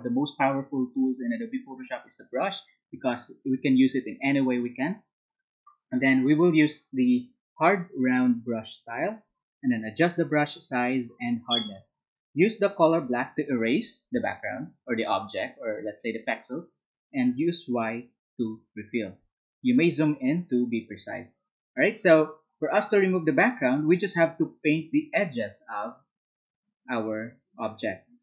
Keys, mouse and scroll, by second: 9.5 Down.